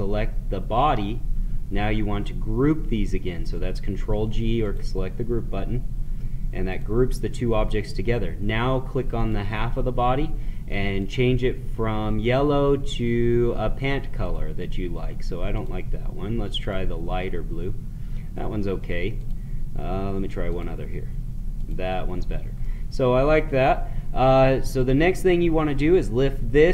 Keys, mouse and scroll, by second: 4.6 click, 9.1 click, 14.2 click, 19.2 click, 22.5-24.7 middle drag, 24.7 click.